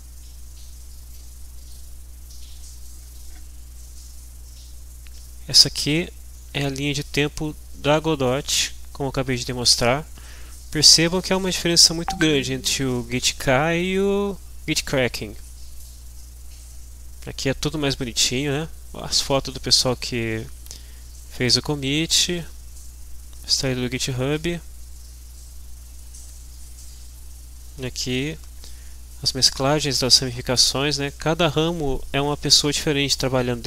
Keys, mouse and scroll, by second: 1.1 click, 18.8 scroll down 2, 20.7-21.6 scroll down 2, 22.0-22.6 scroll down 2, 22.7-24.6 scroll up 2, 24.9-26.2 scroll down 2, 26.5-27.2 scroll down 4, 28.2-28.6 scroll down 2, 29.4-30.6 scroll down 2, 32.4-32.8 scroll down 2.